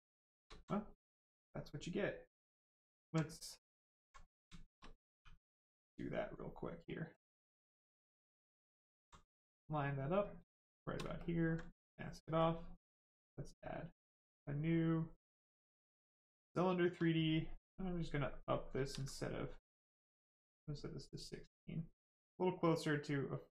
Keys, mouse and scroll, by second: 0.0 shift+right click, 0.5 alt+right click, 1.8 right click, 3.0 alt+right click, 3.7 alt+right click, 3.8 alt+right click, 4.1 right click, 4.2 right click, 4.5 shift+right click, 5.1 shift+w, 7.7 alt+click, 9.2 right click, 10.6 shift+right click, 11.1 ctrl+click, 11.5 right click, 15.5 click, 16.2 right click, 17.5 shift+click, 18.7 ctrl+z, 19.3 click, 21.9 click.